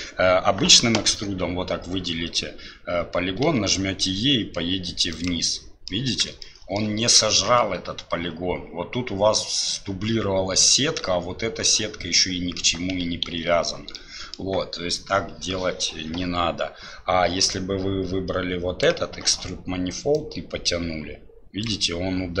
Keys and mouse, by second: 5.6 middle click, 6.6 shift+middle click, 13.3 ctrl+z, 13.9 click, 17.7-18.9 drag, 20.2-21.7 drag.